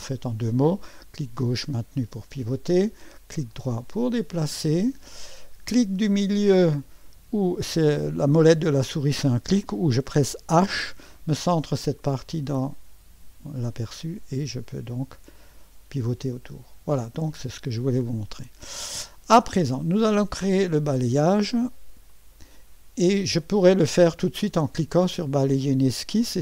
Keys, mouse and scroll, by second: 0.6-3.1 drag, 3.4-5.3 middle drag, 10.6 h, 12.0-17.1 drag, 17.3 click, 19.6-21.4 middle drag, 22.1 click, 23.4 click.